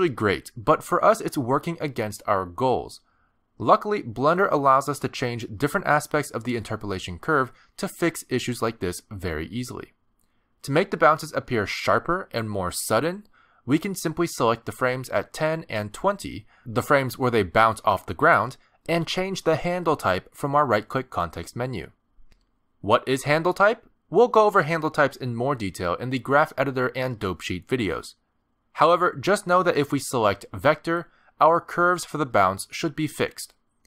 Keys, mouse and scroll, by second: 14.0 space, 15.3 click, 19.6 click, 20.8 shift+click, 22.2 right click.